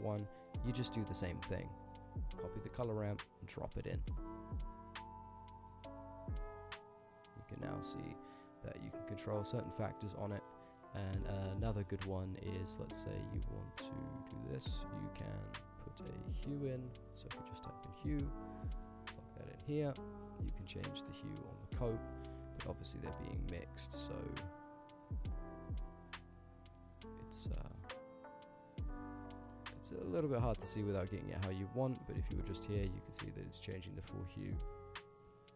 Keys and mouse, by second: 0.3 click, 1.5 click, 2.5 ctrl+c, 2.7 ctrl+v, 3.3 click, 4.0 middle click, 4.9-5.9 drag, 6.4-6.9 drag, 7.2-8.2 drag, 9.0 click, 9.2-10.6 drag, 12.3 click, 12.7 x, 13.3-14.3 drag, 14.9 shift+a, 20.2-21.6 alt+shift+drag, 22.2 ctrl+z, 22.3 middle click, 22.6 middle click, 23.4 click, 23.9 middle click, 25.2-29.3 alt+shift+drag, 29.8 middle click, 30.4 ctrl+z, 30.6 click, 30.7-31.7 drag, 31.9 middle click, 32.7-35.5 alt+shift+drag.